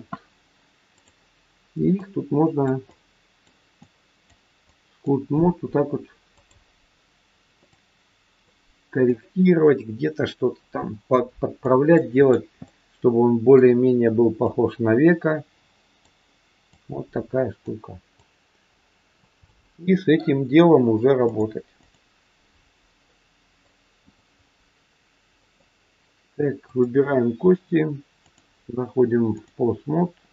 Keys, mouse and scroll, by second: 0.9 click, 2.0 click, 2.8 click, 3.8 click, 4.6 click, 6.4 click, 7.7 click, 9.0 click, 11.8 middle click, 12.7 middle click, 14.4 click, 16.7 click, 18.2 click, 19.4 middle click, 21.3 click, 23.0 middle click, 24.0 click, 24.8-25.3 scroll down 3, 25.3 middle click, 26.7 click, 28.2 click, 29.8-30.3 scroll up 2.